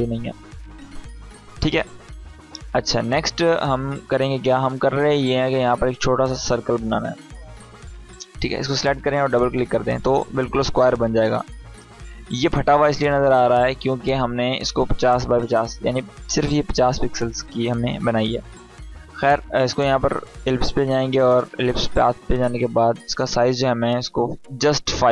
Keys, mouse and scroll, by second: 5.7-6.9 drag, 18.6 click.